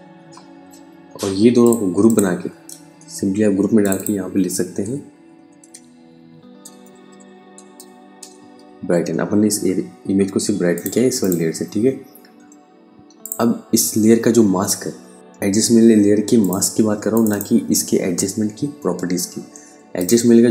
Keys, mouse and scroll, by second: 1.1 click, 1.5 click, 2.4 ctrl+g, 3.3 click, 4.3-7.7 typing, 10.2 click, 15.1 click, 15.9 click, 19.4 click.